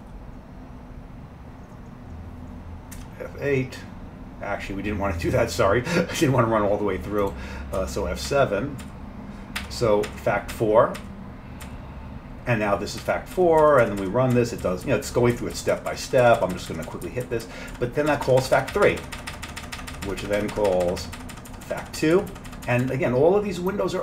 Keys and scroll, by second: 3.0 F8, 7.8 F7, 8.3 F7, 8.9 F7, 9.7 F7, 10.1 F7, 11.0 F7, 11.7 F7, 13.4 F7, 13.7 F7, 14.1 F7, 14.4 F7, 14.7 F7, 15.1 F7, 15.4 F7, 17.1 F7, 17.3 F7, 17.5 F7, 17.8 F7, 18.1 F7.